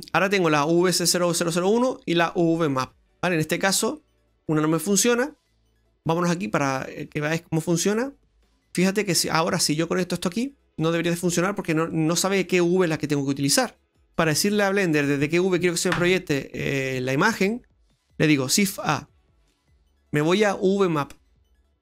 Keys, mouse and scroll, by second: 3.4 scroll down 2, 3.6 middle click, 7.0 click, 8.0 middle click, 8.8 middle click, 10.0 click, 11.9 middle click, 13.9 click, 14.4 Delete, 18.7 shift+a.